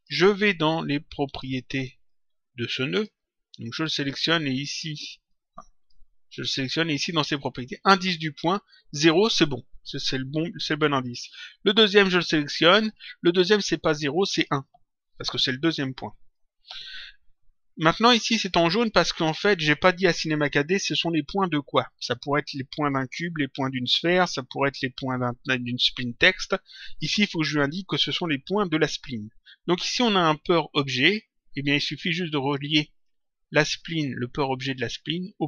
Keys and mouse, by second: 0.7 click, 1.9 click, 3.9 click, 5.2 click, 6.6 click, 12.5 click, 14.1 click, 16.1 click, 19.2 click, 34.7 click.